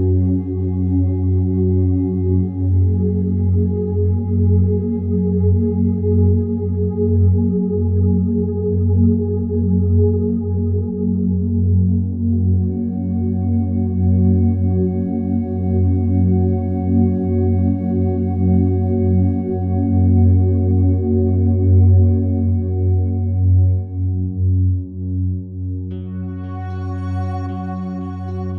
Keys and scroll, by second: 22.6 ctrl+z, 24.7 2, 24.8 Return, 26.3 ., 26.5 5, 26.8 Return.